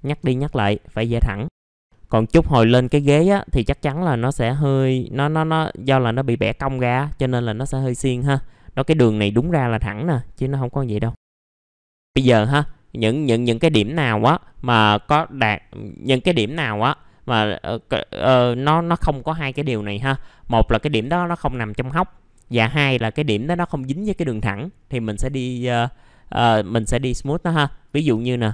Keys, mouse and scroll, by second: 0.4 right click, 1.6 click, 1.7-2.5 scroll down 2, 1.9 middle click, 2.5-2.9 scroll up 1, 4.1-6.4 drag, 6.7-7.2 scroll up 1, 7.4 middle click, 9.4-11.8 drag, 11.8 middle click, 11.9 scroll up 1, 12.6 click, 13.3 scroll up 1, 14.1-16.6 scroll up 1, 19.7 click, 27.4 middle click, 27.8 click, 28.4 ctrl+click.